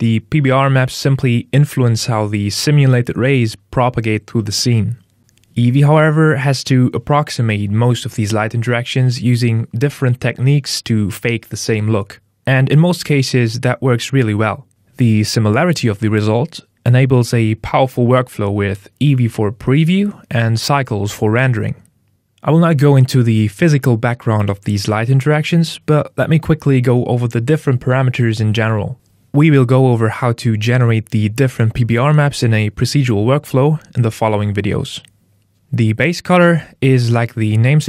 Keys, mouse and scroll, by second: 36.3 click.